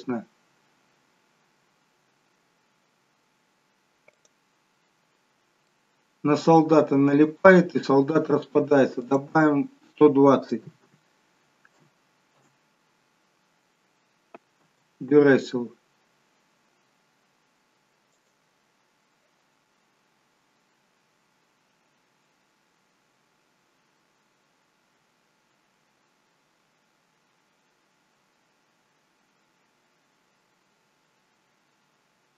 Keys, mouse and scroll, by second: 4.2 click, 5.8 middle click, 7.2 space, 9.4 click, 14.6 space, 18.3 click.